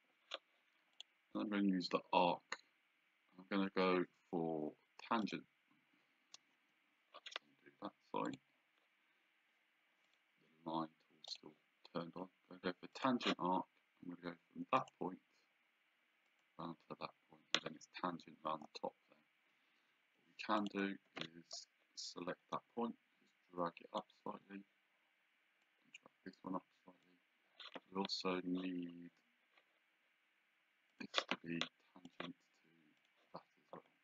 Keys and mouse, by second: 0.9 click, 5.2 click, 6.5 Escape, 8.3 click, 10.1 click, 11.3 click, 12.9 click, 14.8 click, 16.4 click, 20.0 Escape, 20.6 click, 21.2 Caps_Lock, 22.5 click, 25.6 click, 30.9 click, 32.1 click.